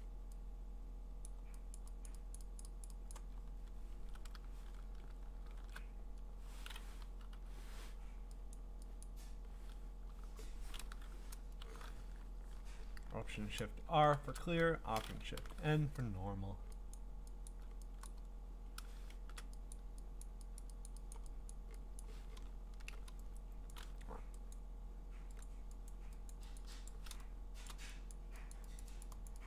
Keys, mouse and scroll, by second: 0.0 middle click, 0.0 click, 1.2 click, 1.7 click, 2.1 click, 2.3 click, 2.6 click, 2.8 click, 3.1 click, 3.4 middle click, 3.5 middle click, 3.6-4.1 scroll, 5.5 alt+shift+r, 7.3 0, 8.5 click, 9.1 click, 11.6 alt+shift+n, 14.0 alt+shift+r, 15.4 alt+shift+n, 17.0 click, 17.5 click, 18.1 click, 19.2 !, 19.7 click, 20.2 click, 20.6 click, 20.9 click, 21.1 click, 21.5 click, 22.0 click, 22.4-23.1 scroll, 23.7 click, 24.5 click, 25.4 click, 26.0 click, 26.3 click, 26.6 click, 26.9 click, 28.1 click, 28.5 click, 28.8 click, 29.0 click, 29.3 click.